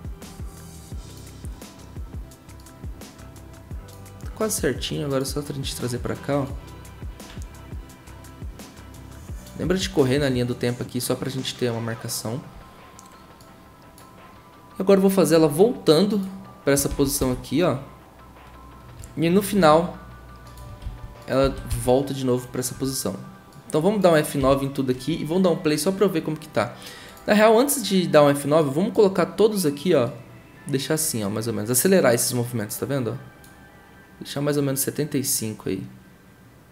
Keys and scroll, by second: 16.9 ctrl+c, 17.2 ctrl+v, 20.8 ctrl+c, 21.4 ctrl+c, 21.7 ctrl+v, 24.4 F9.